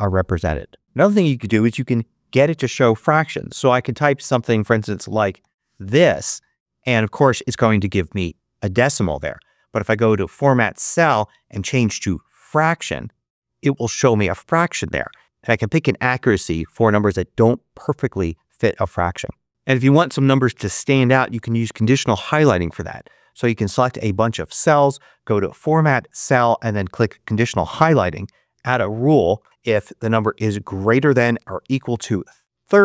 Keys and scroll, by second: 5.7 Return, 5.7 5, 32.3-32.8 typing.